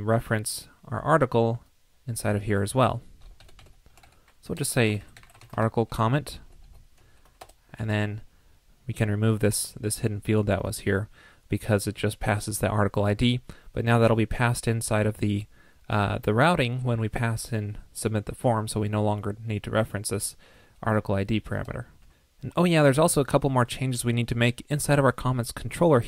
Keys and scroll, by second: 3.4 alt+Left, 3.5 alt+Left, 6.6 super+Right, 7.8 super+s, 9.4 super+z.